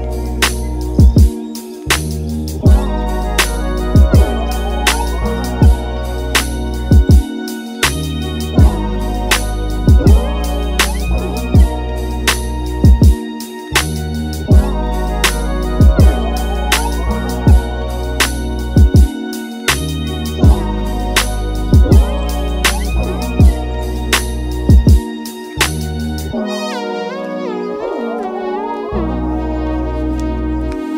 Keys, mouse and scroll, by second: 18.2-30.9 drag.